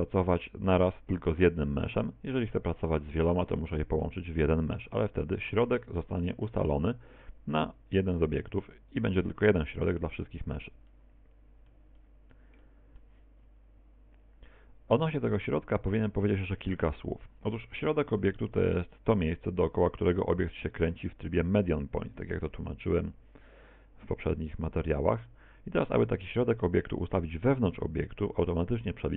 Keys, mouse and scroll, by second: 0.9 middle click, 2.0 middle click, 4.1 middle click, 4.8 middle click, 7.8 right click, 8.2 right click, 9.0 right click, 11.0 middle click, 12.0 middle click, 12.6 middle click, 18.2 r, 22.6 click.